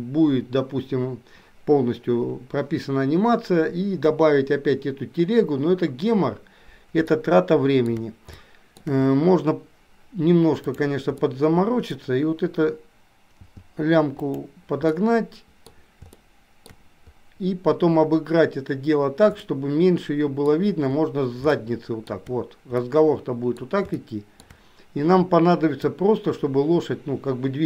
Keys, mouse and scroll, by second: 7.3 shift+middle click, 8.4 shift+middle click, 10.7 click, 11.3 middle click, 13.5 g, 14.9-15.8 scroll up 1, 16.2-16.5 shift+scroll up 1, 16.5 shift+middle click, 19.5-19.9 scroll up 1, 19.9 middle click, 21.7 shift+middle click, 22.9 middle click, 24.0 shift+middle click, 26.4-27.6 drag.